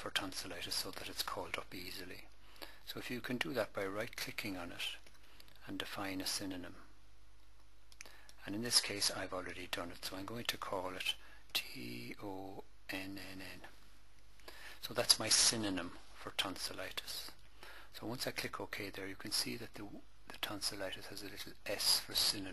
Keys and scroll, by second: 11.3 t, 11.9 o, 12.8 n.